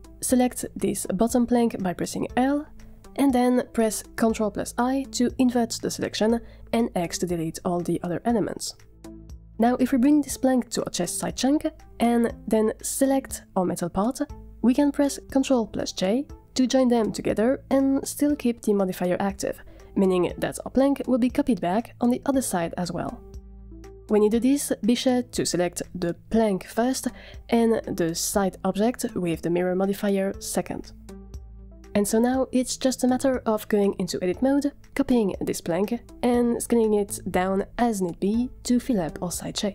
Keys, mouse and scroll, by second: 2.2 l, 3.7 ctrl+i, 5.1 x, 9.5-11.7 typing, 9.6 middle click, 9.7 Tab, 9.8 shift+middle click, 10.1 alt+g, 10.7 middle click, 11.3 click, 11.3 scroll up 4, 11.4 shift+middle click, 11.7 Tab, 11.7 Tab, 12.0-12.5 scroll down 1, 14.1 shift+click, 16.3 ctrl+j, 18.6-20.1 middle drag, 22.2 click, 31.9-32.6 middle drag, 32.7 click, 32.7 Tab, 32.8 shift+middle click, 32.9-39.6 typing, 36.4 middle click, 36.7 shift+click, 37.1 middle click, 37.8 middle click, 38.2 middle click, 38.2 click, 38.9 shift+click.